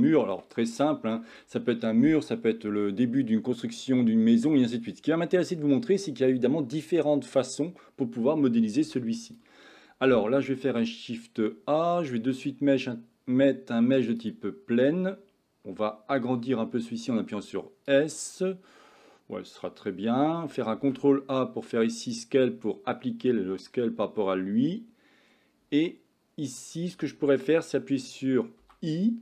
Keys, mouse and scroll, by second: 8.9 x, 10.7 shift+a, 16.4 s, 20.8 ctrl+a, 22.7-23.7 middle drag, 26.1 Tab, 28.7 i.